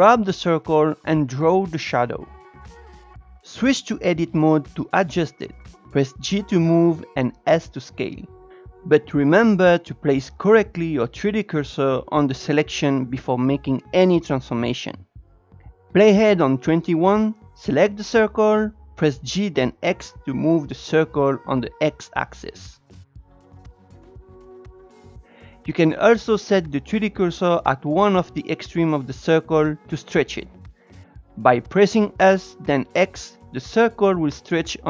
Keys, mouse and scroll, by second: 1.4 click, 4.1 Tab, 4.7 click, 5.3 g, 8.3 shift+right click, 9.0 s, 11.3-12.9 shift+middle drag, 14.3 g, 15.5 click, 20.2 g, 26.4 shift+right click, 28.3 s.